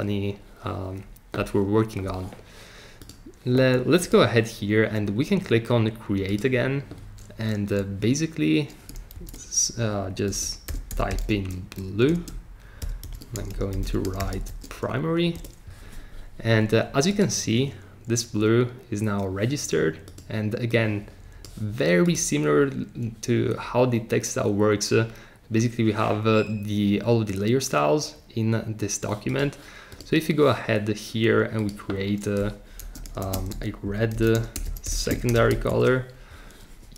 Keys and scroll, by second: 9.1 shift+c, 10.3-15.0 typing, 15.3 Return, 32.6-36.2 typing.